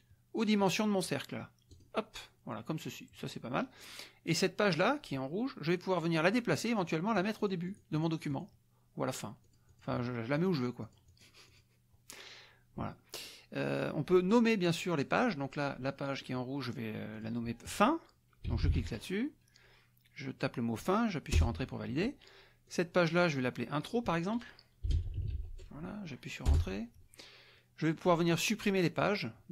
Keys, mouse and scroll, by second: 1.7 click, 6.8 click, 8.3 click, 9.4 click, 10.3 click, 10.8 click, 11.7 click, 17.1 click, 18.2-19.2 typing, 21.3 Return, 22.6 click, 23.8 click, 24.6-25.9 typing, 26.4 Return.